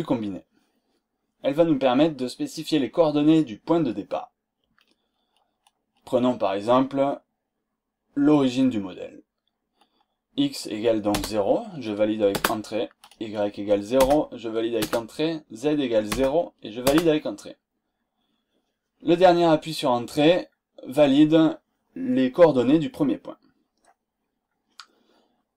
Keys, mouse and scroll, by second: 11.1 KP_0, 12.3 KP_Enter, 14.0 KP_0, 14.8 Return, 16.1 0, 16.8 Return.